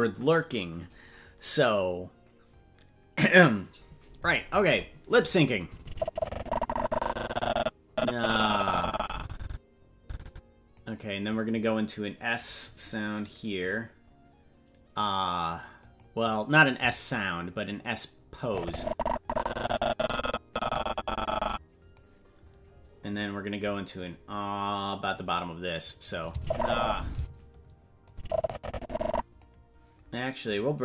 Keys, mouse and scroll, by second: 5.6-10.8 drag, 13.6 click, 15.8 click, 18.4-22.0 drag, 24.0 click, 25.1 click, 26.1 click, 26.3 space, 27.1 space, 28.1-29.4 drag.